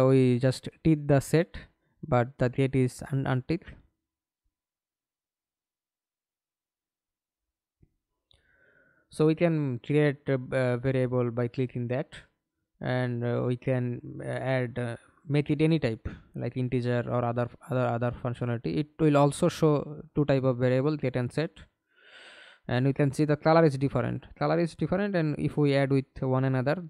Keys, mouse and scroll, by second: 2.5 click, 9.9-11.3 typing, 18.9 right click.